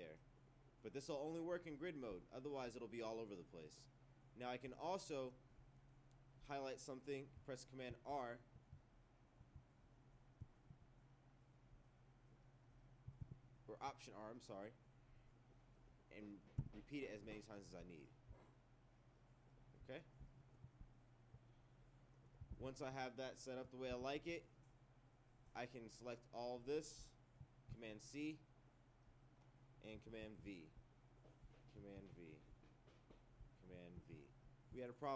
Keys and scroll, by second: 7.9 super+r, 13.2 alt+r, 17.2 Return, 22.5 ctrl+1, 23.9 ctrl+2, 27.7 super+c, 30.2 super+v.